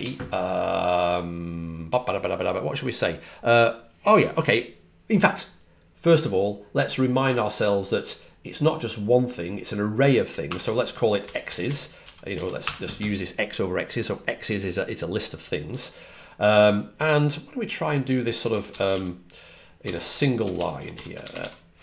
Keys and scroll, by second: 10.9-13.0 typing, 15.6 typing, 19.5-21.3 typing.